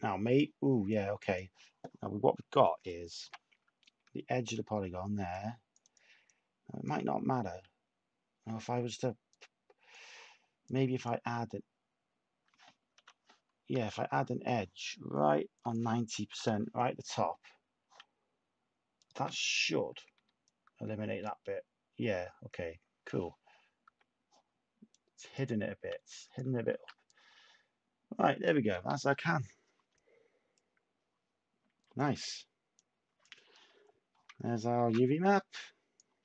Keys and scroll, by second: 3.2 /, 7.2 Tab, 8.6 Tab, 12.9-14.2 typing, 16.1-16.8 typing, 19.1 /, 23.8 Tab, 26.7 shift+a, 28.6 s, 34.8 a.